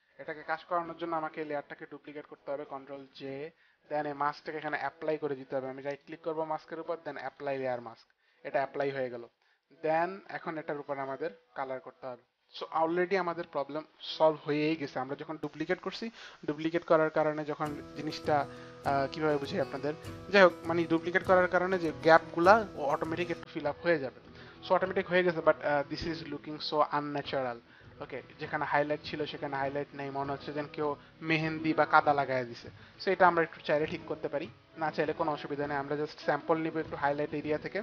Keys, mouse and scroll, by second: 2.8 ctrl+j, 6.0 right click, 7.4 click.